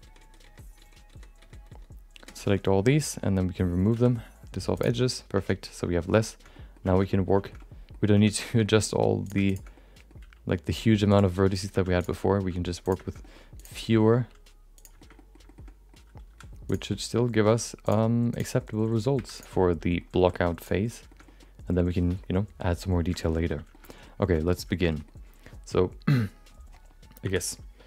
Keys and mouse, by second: 3.9 x, 5.6 Tab, 5.9 middle click, 6.5 middle click, 6.9 shift+middle click, 7.0 middle click, 7.4 shift+middle click, 7.5 middle click, 8.1 Tab, 8.4 shift+middle click, 8.6 middle click, 9.2 click, 9.4 shift+click, 9.7 middle click, 10.2 g, 11.4 middle click, 11.7 1, 12.0 click, 12.3 g, 13.1 middle click, 13.6 click, 13.8 middle click, 14.1 g, 15.0 shift+middle click, 15.4 shift+middle click, 15.7 middle click, 16.3 2, 16.6 click, 16.9 middle click, 17.4 g, 18.3 click, 18.5 middle click, 19.1 1, 19.3 click, 19.6 middle click, 20.1 g, 21.1 shift+middle click, 23.4 middle click, 23.9 middle click, 24.4 middle click, 24.9 middle click, 27.2 2.